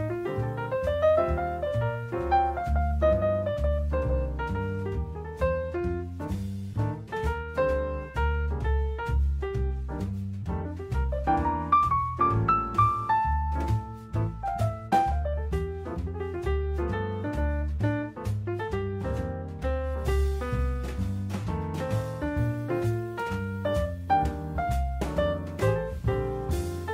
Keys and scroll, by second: 2.5 Escape, 4.5 Escape, 9.9 Escape, 12.2 Escape, 17.7 Escape, 19.8 Escape, 23.0 Escape.